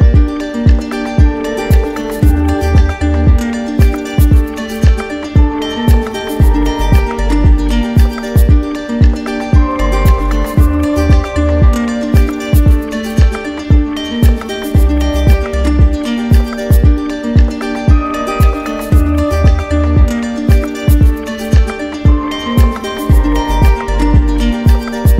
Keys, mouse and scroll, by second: 0.2 ctrl+z, 1.0 shift+right click, 1.6 right click, 5.9 w, 8.6 click, 10.4 right click, 11.0 shift+right click, 17.4 click, 18.3 right click, 18.9 shift+right click, 19.9 right click, 20.1 right click, 21.0 right click, 23.6 click, 24.4 right click, 25.0 right click.